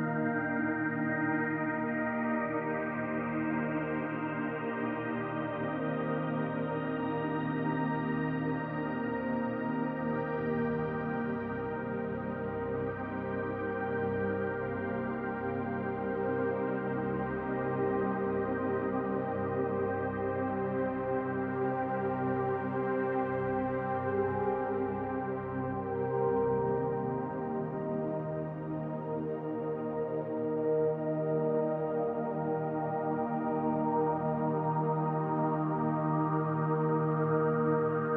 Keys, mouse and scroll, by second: 1.2 s, 4.2 middle click, 5.4 KP_Decimal, 6.2-6.9 scroll down 3, 6.6 middle click, 8.9 click, 10.0-10.8 scroll down 4, 10.3 middle click, 11.5-12.0 scroll up 1, 12.3 click, 13.5 Tab, 15.2 click, 15.8 click, 16.2 middle click, 16.6 shift+middle click, 17.4 click, 18.2-18.9 scroll down 6, 19.6 middle click, 21.4 middle click, 22.7 scroll up 1, 24.4-24.8 scroll up 3, 24.8 s, 28.7 click, 31.3 s, 33.2-33.6 scroll up 1, 34.4 click, 34.4-35.2 scroll up 2, 36.0 s, 37.4 shift+middle click.